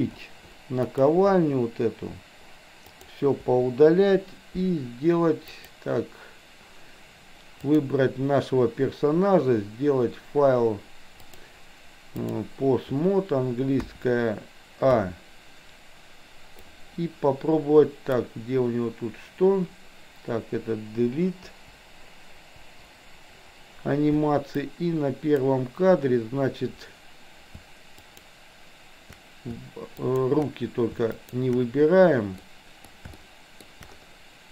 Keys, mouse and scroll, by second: 0.1 Delete, 0.9 click, 1.3 Delete, 2.9 click, 5.5 click, 7.5 click, 11.1-12.5 drag, 13.8 KP_1, 15.0 a, 16.6 click, 21.4 Delete, 22.6 Delete, 24.6 click, 28.0 shift+click, 30.0 shift+click, 31.3 shift+click, 32.4 middle click, 33.3 shift+middle click.